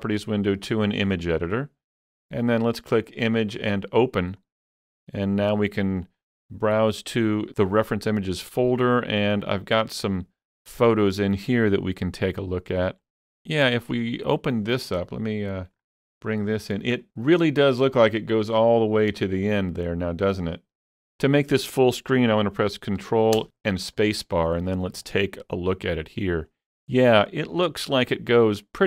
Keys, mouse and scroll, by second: 1.1-3.1 drag, 3.1 click, 4.3 click, 6.1 click, 7.2 click, 7.4 double click, 9.5 click, 9.7 double click, 14.7 double click, 15.0-15.4 scroll down 1, 15.4-16.9 middle drag, 16.5-16.9 scroll up 1, 17.0-17.6 scroll up 1, 23.0 middle click, 23.0 scroll up 1, 23.4 ctrl+space, 24.7 scroll up 1, 25.1-28.1 shift+middle drag.